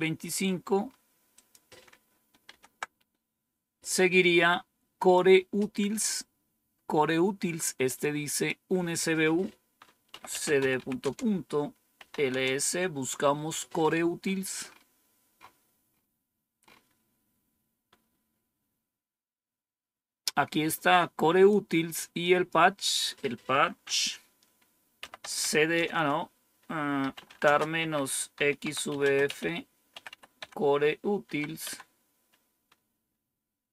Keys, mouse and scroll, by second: 0.4-1.3 scroll up 3, 1.3 click, 4.9 click, 8.2 click, 9.8-12.9 typing, 14.1 scroll up 1, 20.1-21.4 drag, 22.1 click, 22.7 click, 24.7-25.6 typing, 26.7-30.5 typing, 31.2 Tab.